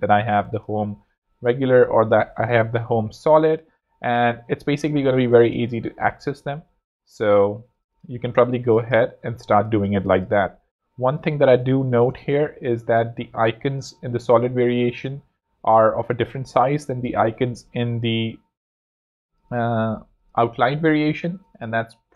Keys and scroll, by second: 2.0-4.4 typing, 7.2 super+x, 7.6 alt+super+z, 8.3 alt+z, 16.8 z, 18.7 z, 20.0 z, 21.9 z.